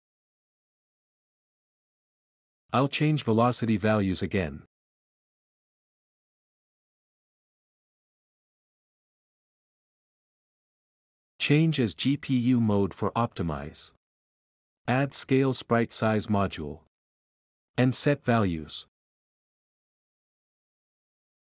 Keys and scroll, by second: 2.5-3.3 typing, 11.3 ctrl+c, 11.3 ctrl+v, 11.3 Delete, 19.2-19.5 typing.